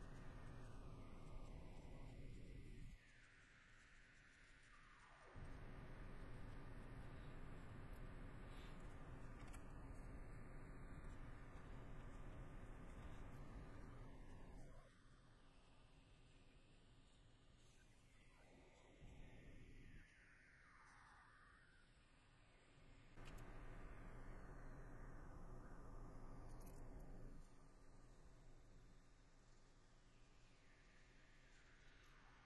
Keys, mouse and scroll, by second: 0.2 middle click, 0.8 middle click, 1.2 middle click, 2.5 middle click, 5.6 middle click, 6.5 middle click, 7.9 scroll, 8.0 middle click, 12.4 middle click, 13.3 scroll, 13.4 middle click, 17.6 middle click, 18.8 middle click, 20.9 middle click, 22.2 middle click, 27.1 middle click, 31.6 middle click, 32.0 scroll, 32.1 middle click.